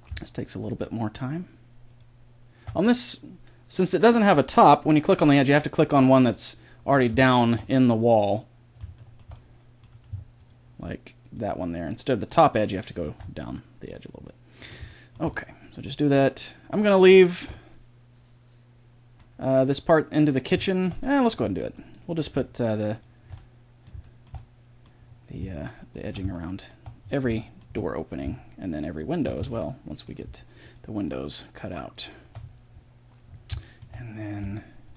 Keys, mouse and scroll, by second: 3.0-4.7 middle drag, 6.0-10.4 middle drag, 13.8 click, 14.2-17.2 middle drag, 17.4-19.0 middle drag, 19.1 middle click, 19.8-22.9 middle drag, 22.9 click, 23.6 middle click, 23.9 click, 24.6-25.9 middle drag, 25.9-27.6 drag, 27.6-28.8 middle drag, 29.4 ctrl+z, 33.0-34.0 drag, 34.0 middle click.